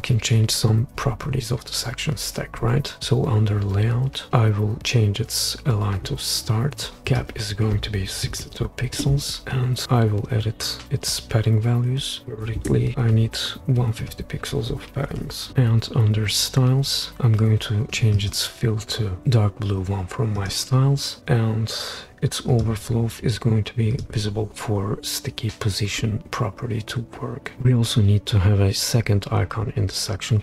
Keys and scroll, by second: 8.3 typing, 9.0 Return, 12.1 typing, 12.6 Return, 14.3-15.5 typing.